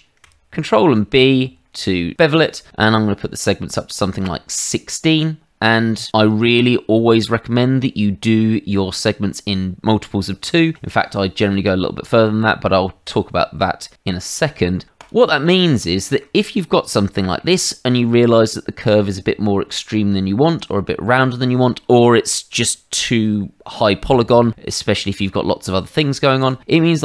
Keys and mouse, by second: 0.6 ctrl+b, 15.0 click, 16.0 shift+middle click, 16.4 middle click, 17.9 middle click, 26.4 click.